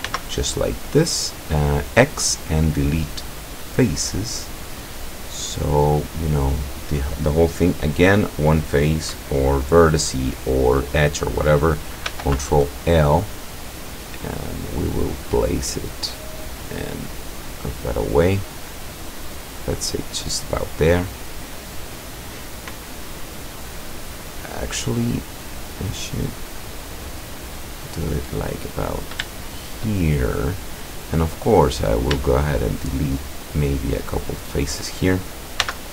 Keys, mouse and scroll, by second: 0.1 x, 3.6 click, 4.5-6.2 middle drag, 6.6 right click, 12.1 ctrl+l, 13.6-15.2 drag, 15.8-16.9 drag, 17.7-21.7 drag, 22.7-25.0 middle drag, 26.0-27.8 drag, 28.0-29.1 middle drag, 29.5-31.1 shift+middle drag, 31.3 click, 31.8 right click, 33.5 shift+right click, 34.4 shift+right click, 35.7 x.